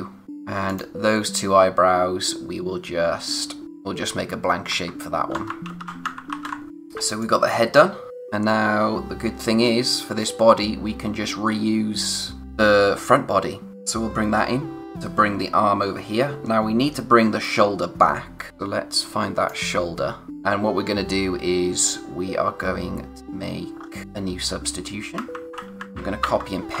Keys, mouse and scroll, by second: 0.2-0.6 scroll up 1, 0.6 click, 3.6 alt+shift+Num_Lock, 4.7 alt+shift+d, 5.6 ctrl+z, 6.3 alt+shift+r, 6.7 scroll down 1, 7.0 space, 7.2 click, 7.5 space, 8.1 click, 12.3-13.5 scroll down 1, 13.7 click, 14.0-14.5 scroll up 1, 14.8 click, 18.5 space, 19.7-20.3 scroll up 1, 23.7 scroll down 1, 25.5 z, 26.2 alt+shift+d.